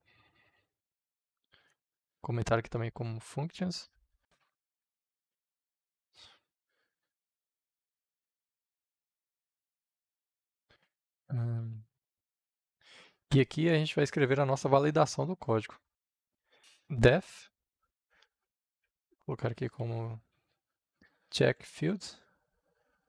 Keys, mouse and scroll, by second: 0.0 Up, 1.3 Tab, 2.7 shift+3, 3.3 Return, 3.8 shift+3, 4.1 Return, 4.5 shift+3, 5.6 click, 5.9-7.9 typing, 8.1 Return, 9.2-10.4 typing, 11.4 Down, 12.0 Return, 15.8 click, 16.6 f, 18.2-22.7 typing.